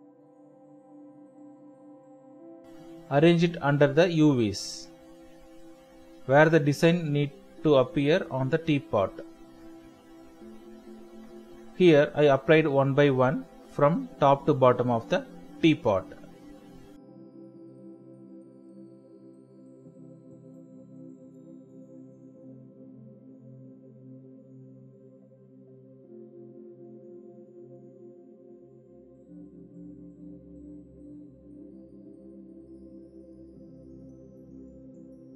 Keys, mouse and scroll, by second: 0.2 right click, 1.2 Escape, 7.1 ctrl+t, 7.6 shift+click, 9.1 Return, 9.5 ctrl+space, 9.6 ctrl+click, 9.7 ctrl+space, 10.4-11.0 typing, 11.6 alt+click, 15.9 Return, 18.0 double click, 21.6 ctrl+0, 22.2-23.0 typing, 25.3 Tab, 25.7-26.2 typing.